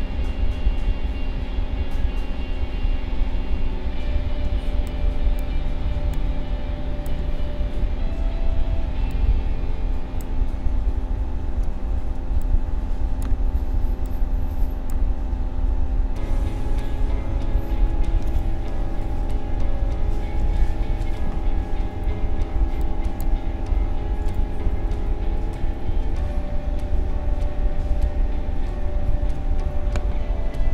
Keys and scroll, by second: 4.4 space, 12.3 space.